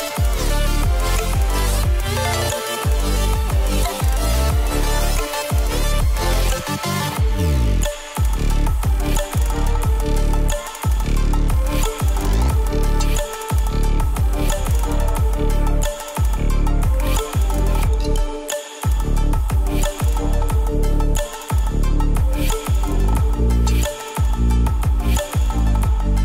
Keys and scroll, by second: 0.2 ctrl+z.